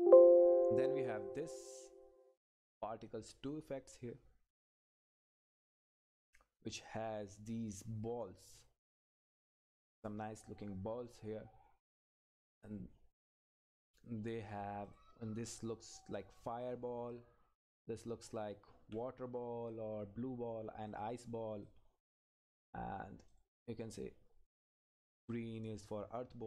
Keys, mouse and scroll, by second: 6.3 click, 6.8-8.6 scroll up 1, 8.6 click, 9.1-9.9 scroll up 1, 9.9 click, 12.3 Up, 13.9 click, 14.3 Down, 14.9 click, 16.9 Left, 19.7 click.